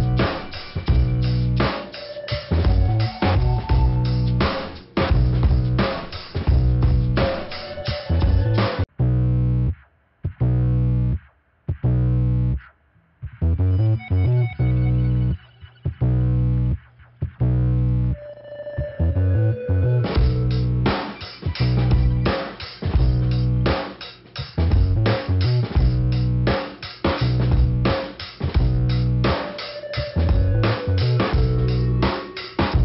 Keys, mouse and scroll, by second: 0.9 click, 2.1 click, 3.2 click, 4.5 right click, 8.2 click, 8.8 middle click, 10.1 click, 11.7 right click, 12.7 click, 12.8 click, 13.6 middle click, 14.4 scroll up 1, 15.4 click, 16.8 click, 18.3 scroll down 1, 19.1 click, 19.9 middle click, 21.8 click, 24.2 middle click, 25.9 middle click, 27.3 click, 28.2 click, 29.1 click, 30.1 click, 31.2 click, 32.0 click.